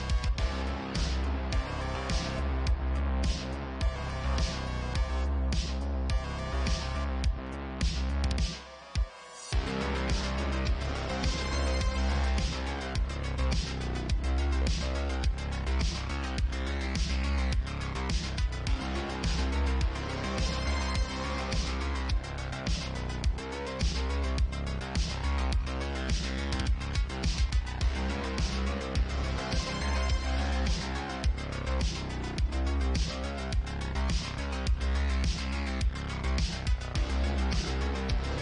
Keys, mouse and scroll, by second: 0.6 ctrl+z, 0.6-2.6 ctrl+drag, 1.4 Tab, 2.6-3.9 alt+middle drag, 3.9 g, 5.5 s, 11.3 e, 12.5 e, 14.3 e, 17.2 e, 19.0 Tab, 19.7 alt+x, 19.7 alt+middle click, 20.2 click, 21.8 ctrl+w, 22.0-23.0 ctrl+middle drag, 23.0 click, 23.2-24.2 middle drag, 23.4 Tab, 24.2-28.8 alt+drag, 24.9 Tab, 25.6 ctrl+a, 26.0 Tab, 27.2 e, 28.8 e, 30.5 s, 31.7 e, 34.9 e, 36.8 e, 37.6 s.